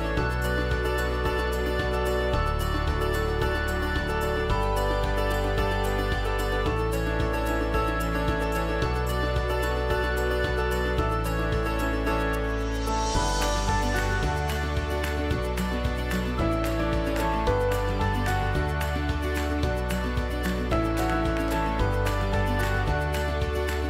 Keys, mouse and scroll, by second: 17.8-22.2 alt+drag.